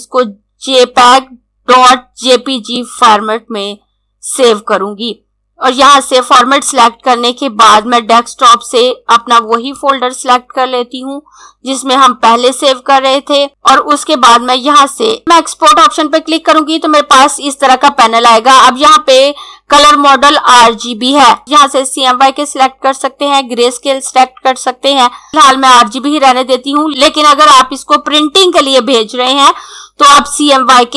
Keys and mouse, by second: 2.5 click, 9.2 click, 21.1 click, 25.3 click.